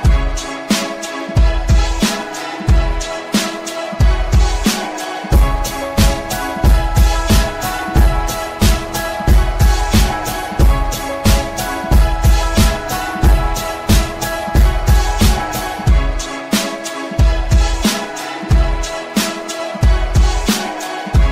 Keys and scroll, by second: 12.3 shift+F2, 13.4 Escape.